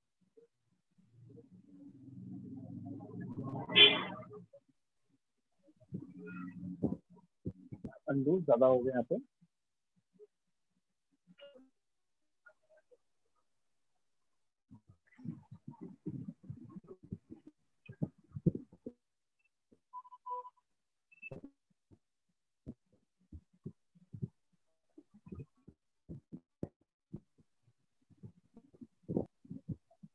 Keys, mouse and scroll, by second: 3.6 click, 4.5 alt+click, 5.5 click, 7.4 click, 8.4 ctrl+z, 11.4 click, 12.4 click, 13.4 click, 15.7 alt+click, 16.5 alt+click, 17.4 click, 18.5 click, 19.5 click, 20.4 click, 21.4 f, 23.5 click, 24.5 shift+click, 25.5 right click, 27.4 shift+click, 28.4 shift+click.